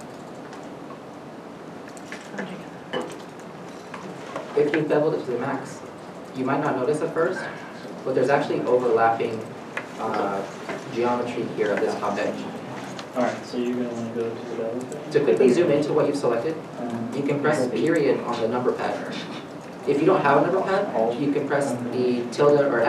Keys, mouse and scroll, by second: 0.0 scroll up 1, 0.8 middle click, 1.6 scroll up 1, 2.7 shift+middle click, 3.0-3.5 scroll up 1, 3.9-4.2 scroll, 4.2-5.0 scroll down 1, 8.4 ., 8.9-9.6 scroll, 11.4 middle click, 12.9 middle click, 12.9-14.3 scroll down 1, 15.2-15.7 scroll down 1.